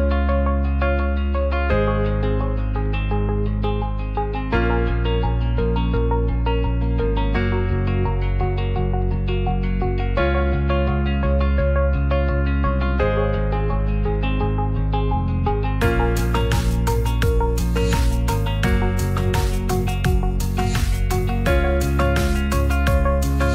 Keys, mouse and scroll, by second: 0.6 middle click, 1.7 s, 1.8 z, 3.3 g, 3.9 click, 4.2 s, 4.3 z, 4.9 click, 5.2 ctrl+a, 5.8 middle click, 6.8-8.7 shift+drag, 9.6 shift+click, 11.1 shift+click, 12.7 ctrl+s, 13.2 shift+middle click, 13.6-14.6 drag, 14.7 shift+click, 15.2 KP_Divide, 16.5 click, 17.2 click, 18.0 s, 18.0 x, 19.0 click, 19.8 ctrl+a, 20.2 middle drag, 21.6 drag, 21.8 shift+middle drag, 23.3 middle click.